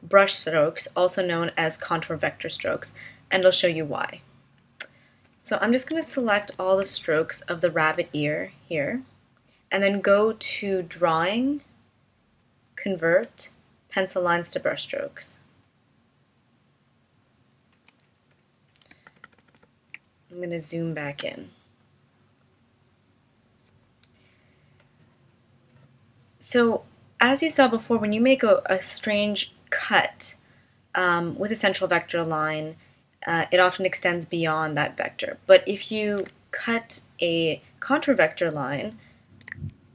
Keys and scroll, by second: 19.2 super+=, 20.5 space, 36.2 BackSpace, 39.5 a.